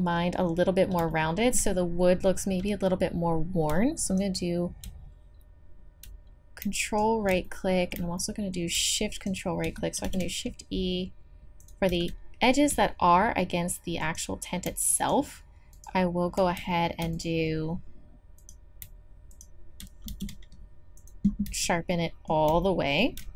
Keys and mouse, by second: 6.0 middle click, 7.4 click, 7.8 click, 8.2-11.6 drag, 10.0 shift+e, 11.9 z, 14.0-15.1 drag, 20.1 shift+e, 21.5 z.